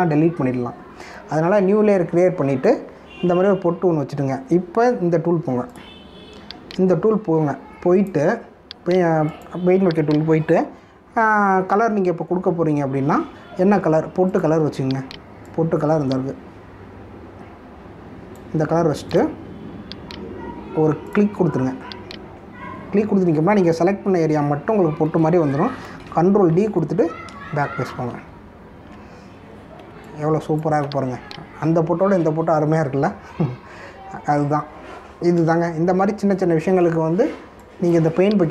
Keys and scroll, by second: 27.2 ctrl+d, 28.6 ctrl+-, 30.9 space, 36.6 ctrl+=, 37.8 space.